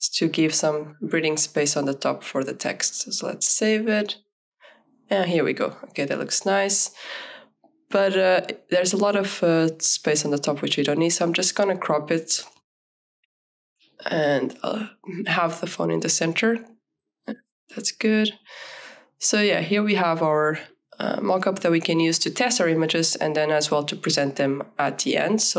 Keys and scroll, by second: 3.6 ctrl+s, 9.5 c, 21.3 ctrl+=.